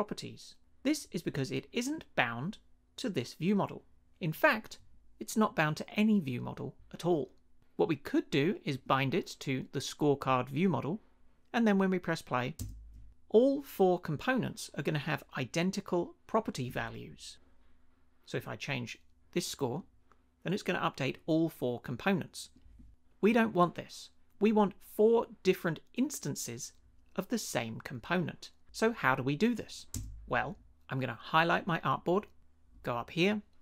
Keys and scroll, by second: 12.6 space, 29.9 space.